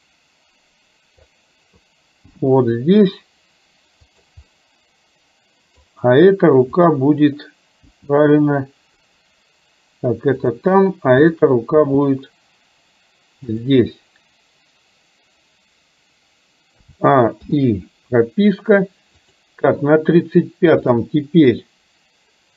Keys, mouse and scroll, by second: 0.1-1.4 drag, 2.4 g, 4.6-5.9 middle drag, 6.8 click, 7.9 g, 11.2 click, 11.9 g, 16.9 a, 17.6 i, 19.4 click, 20.9 click, 21.6-22.5 middle drag.